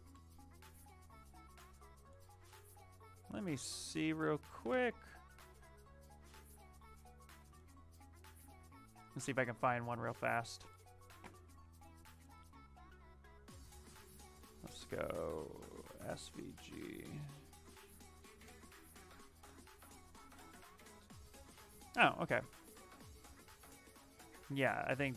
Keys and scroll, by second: 0.0-1.3 typing, 8.0 ctrl+n, 15.8 s, 16.1 g, 19.3 Return.